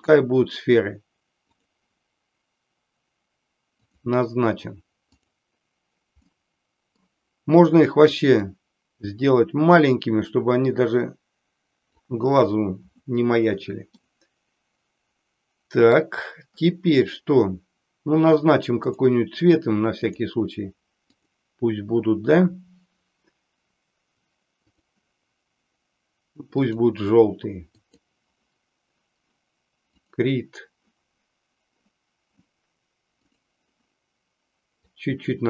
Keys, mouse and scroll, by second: 3.8 click, 6.2 middle click, 8.2-12.0 drag, 14.0-16.0 middle drag, 18.8 click, 20.0 click, 24.5-26.9 drag, 27.7 click, 29.9 click, 33.1 click, 34.9-35.4 drag.